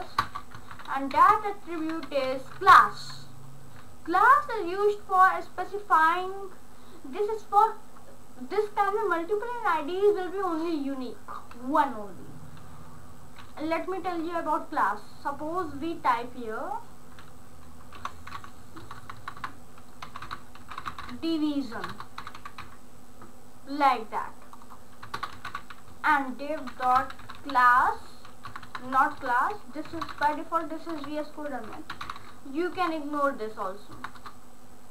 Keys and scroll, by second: 0.2 Return, 0.6 Up, 1.2-2.9 typing, 17.8-23.1 typing, 25.2-28.5 typing, 29.7-32.8 typing, 34.0 BackSpace.